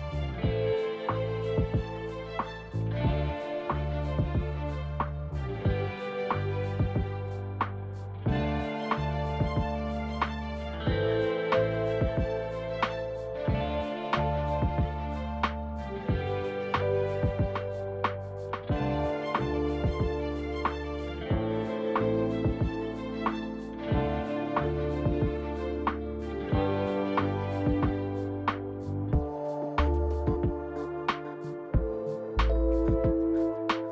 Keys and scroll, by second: 0.0-0.8 typing, 2.2-3.0 typing, 5.2-6.0 typing, 8.0 ctrl+d, 15.2-19.0 typing, 22.2-23.0 typing, 30.9-31.7 typing.